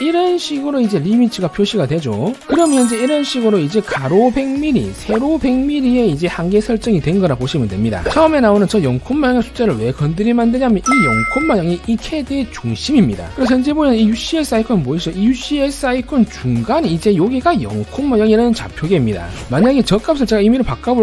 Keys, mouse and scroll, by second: 1.1-1.5 scroll up 2, 1.6 middle click, 15.8 middle click.